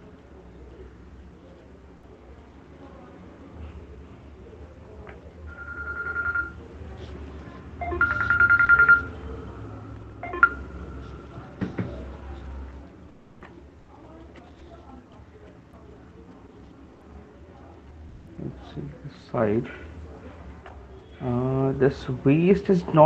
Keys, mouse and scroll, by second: 0.8 alt+click, 6.9 click, 12.9 click, 13.4 middle click, 13.4 right click, 14.5 shift+click, 15.4 alt+click, 19.4 shift+click, 20.9 click, 22.7 alt+click.